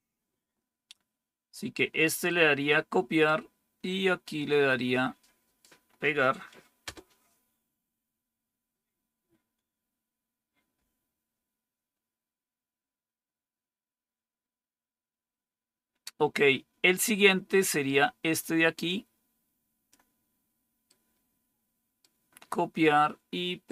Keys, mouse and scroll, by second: 0.6 typing, 2.2-3.2 right drag, 4.2-5.5 right drag, 6.8 Return, 16.8-18.0 scroll down 1, 18.8-19.9 drag, 20.8-22.0 right drag, 23.6-23.7 right drag.